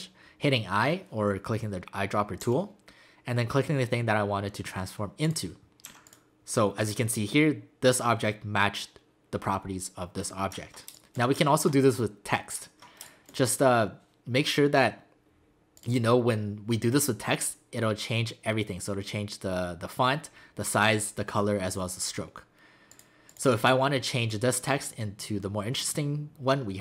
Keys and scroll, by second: 2.4 i, 5.9 v, 10.9 space, 13.0 space.